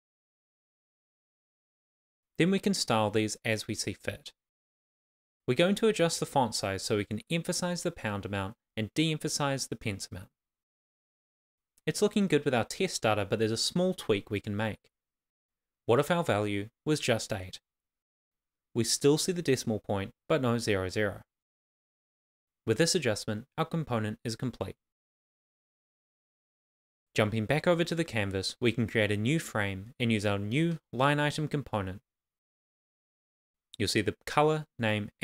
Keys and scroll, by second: 0.4-3.6 typing, 0.8 Left, 1.2 Left, 4.0 super+s, 8.0-9.7 typing, 8.2 Left, 8.8 Left, 11.2 shift+w, 11.8 shift+;, 12.5 super+s, 17.5 super+s, 20.1 shift+\, 20.4 shift+', 21.0 super+s, 23.8 super+s.